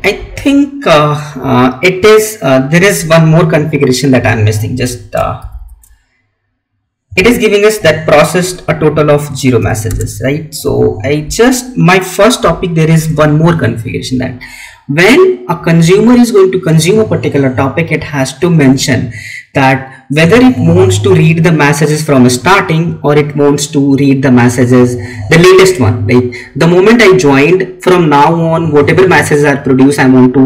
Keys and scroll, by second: 5.4 ctrl+c, 10.5 Up, 11.1 Left.